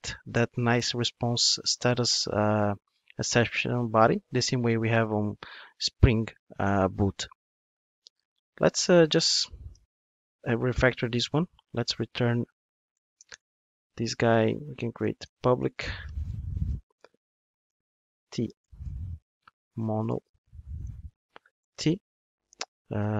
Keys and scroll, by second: 9.7 alt+super+m, 11.8 super+x.